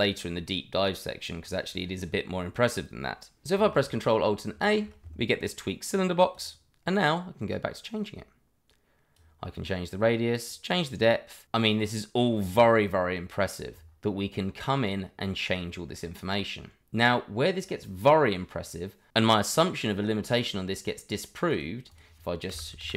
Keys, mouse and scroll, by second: 4.5 ctrl+alt+a, 5.9 click, 12.5 click, 15.6-16.2 scroll down 1, 18.1 middle click, 22.1 double click, 22.5 Delete, 22.8 shift+a.